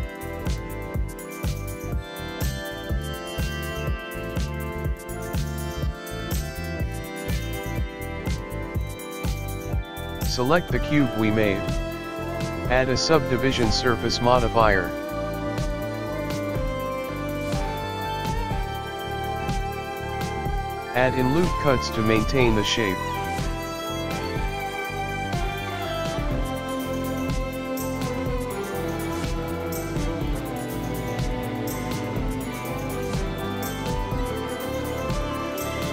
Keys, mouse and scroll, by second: 0.2-0.9 scroll down 5, 0.9 middle click, 1.0-1.7 scroll up 4, 3.5 click, 3.6 alt+click, 3.9-4.5 scroll down 4, 4.9 middle click, 4.9 KP_1, 4.9 e, 6.5 ctrl+r, 9.1-9.5 scroll down 6, 9.2 click, 9.6 Tab, 9.6 middle click, 9.8 ctrl+s, 9.8 shift+middle click, 9.8 scroll down 2, 9.8 KP_1, 10.4 shift+middle click, 11.1 click, 12.7-13.1 scroll up 1, 18.9 click, 20.0 click, 20.5 click, 20.6 click, 22.4 Tab, 22.7 shift+r, 23.7 Tab, 23.7 click, 24.4 ctrl+r, 26.1 Escape, 26.8 click, 27.5 ctrl+r, 28.6 ctrl+r, 30.0 ctrl+r, 32.2 ctrl+r, 34.9 click, 35.0 middle click.